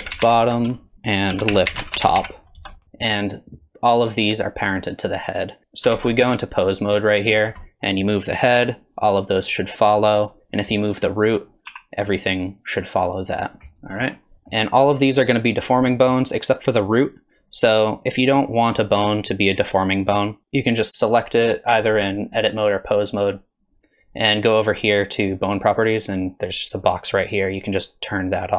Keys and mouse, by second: 0.9 F2, 5.6 ctrl+Tab, 6.2 ctrl+Tab, 7.1 click, 7.6 drag, 8.6 r, 11.3 click, 11.7 r, 14.3 ctrl+Tab, 14.3 drag, 15.9 click, 20.4 Tab, 21.7 Tab, 23.8 click, 27.4 click.